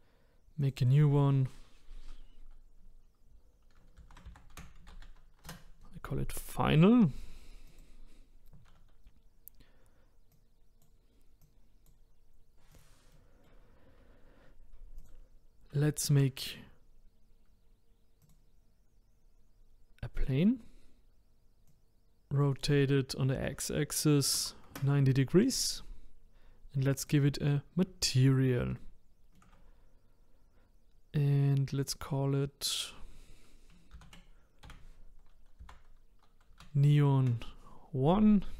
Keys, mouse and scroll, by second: 0.6 click, 0.8-3.9 drag, 7.7 click, 10.3 click, 11.4 click, 12.7 click, 13.1-14.9 middle drag, 14.9 click, 16.1 shift+a, 20.1-25.5 drag, 26.9-28.0 drag, 28.0-31.8 shift+middle drag, 31.8-34.9 drag.